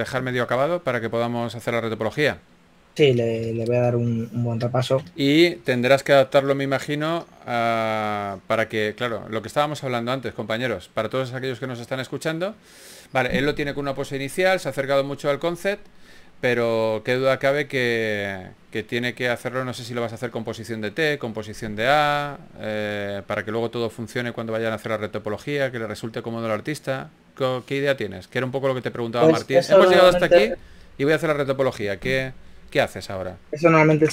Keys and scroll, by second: 3.4 s, 7.9-8.7 typing, 20.4 s, 21.5 typing, 32.6 shift+f.